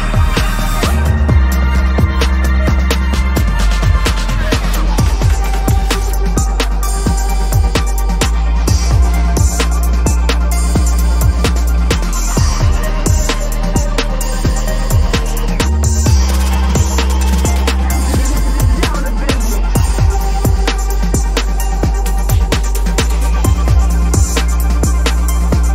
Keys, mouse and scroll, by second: 0.7 alt+click, 0.9 double click, 1.5 right click, 2.3 Return, 4.1 alt+click, 12.2 double click, 12.4 ctrl+-, 12.7 ctrl+-, 12.9 ctrl+-, 13.2 ctrl+-, 13.4 ctrl+-, 14.7 ctrl+=, 14.8 ctrl+=, 15.1 ctrl+=, 15.2 space, 17.9 ctrl+t, 21.4 Return, 22.0 ctrl+-, 22.3 ctrl+-, 23.2 ctrl+=, 23.4 ctrl+=, 23.9 ctrl+t.